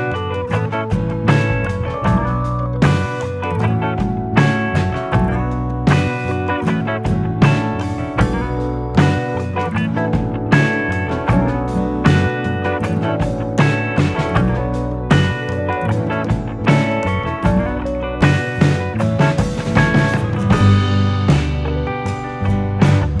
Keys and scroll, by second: 7.1-8.5 typing, 11.5-12.3 typing, 23.0 ctrl+-.